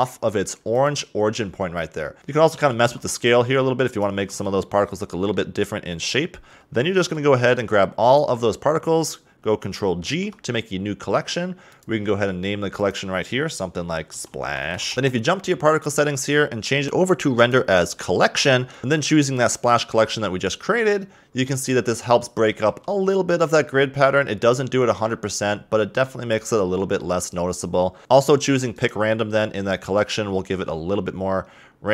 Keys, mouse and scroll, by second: 1.7-2.2 scroll up 4, 2.2 l, 3.0 s, 4.4 a, 4.7 Tab, 5.3 scroll down 1, 5.5-7.3 middle drag, 7.3 b, 10.2 ctrl+g, 12.0 click, 13.0-14.9 drag, 14.9 scroll up 2, 16.8-21.9 drag, 22.1 a, 22.2-25.5 middle drag, 28.0 middle click, 30.6 click.